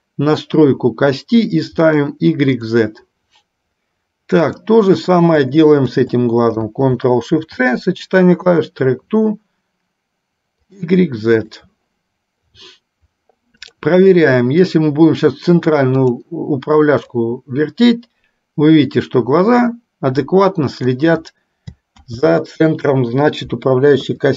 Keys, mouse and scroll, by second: 2.0 click, 4.5 click, 6.2 shift+click, 7.5 ctrl+shift+c, 10.9 click, 11.8 click, 14.3 middle click, 16.0 click, 17.3-21.3 drag, 22.2 ctrl+z, 24.0 KP_3.